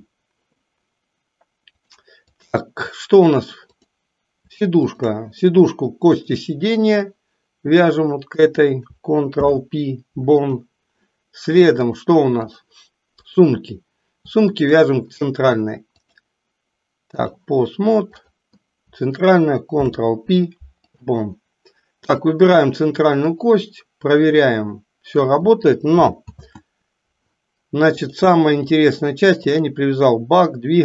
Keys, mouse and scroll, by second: 1.6-2.5 drag, 4.9 shift+click, 6.0-7.1 drag, 7.7 click, 9.2 ctrl+p, 11.8 click, 13.2 click, 14.5 shift+click, 15.9-17.4 drag, 18.1 click, 19.8 ctrl+p, 22.0-22.4 drag, 23.4-25.2 drag, 26.2 ctrl+z, 28.0-29.0 drag, 29.4 click.